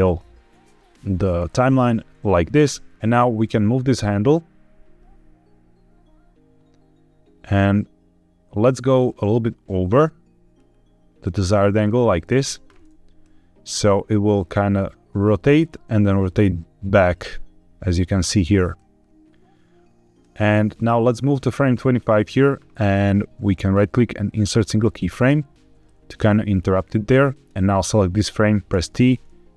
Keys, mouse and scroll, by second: 1.3 middle click, 2.9 click, 3.4 click, 13.1-16.9 drag, 18.6-20.1 drag, 20.6 click, 23.5-24.6 right drag, 25.7 shift+middle click, 26.4 scroll down 1, 27.2 click, 28.6 t.